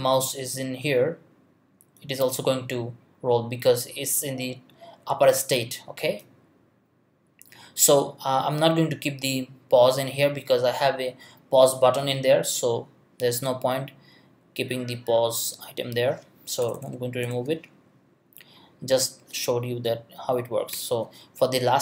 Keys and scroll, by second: 16.6 BackSpace, 20.7 BackSpace.